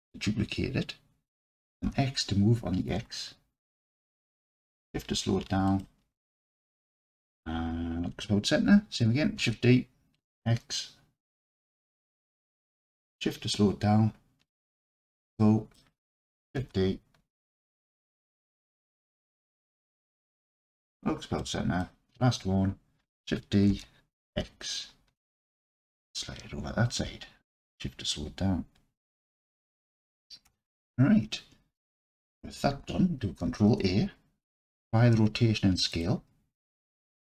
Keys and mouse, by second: 1.8 x, 5.7 shift+click, 6.3 middle click, 9.4 shift+d, 10.2 x, 14.8 shift+click, 15.4 middle click, 16.6 shift+d, 20.8 click, 21.4-21.8 middle drag, 23.7 shift+d, 24.4 x, 29.3 shift+click, 30.5 Tab, 33.5 ctrl+a.